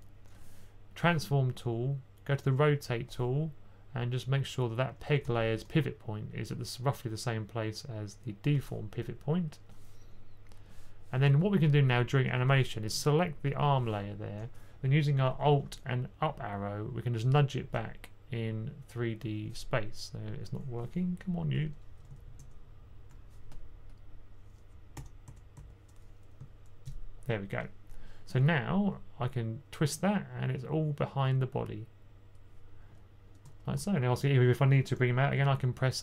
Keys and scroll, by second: 5.0-5.5 typing, 12.2 typing, 17.3 alt+Up, 17.6 alt+Up, 22.0 alt+Up, 22.3 alt+Up, 24.9 b, 25.2 b, 25.5 b, 26.7 alt+Up.